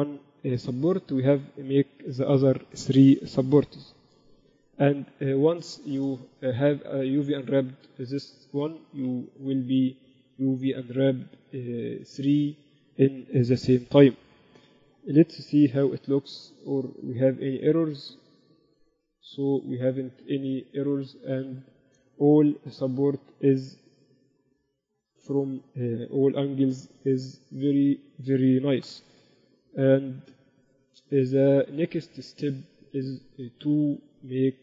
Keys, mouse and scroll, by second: 0.4-1.6 right drag, 16.3 KP_1, 18.8 KP_2, 22.0-24.7 middle drag, 24.7 KP_8, 25.4 KP_4, 25.6 KP_4, 28.2 ctrl+s, 29.4-30.8 typing, 31.8 ctrl+s.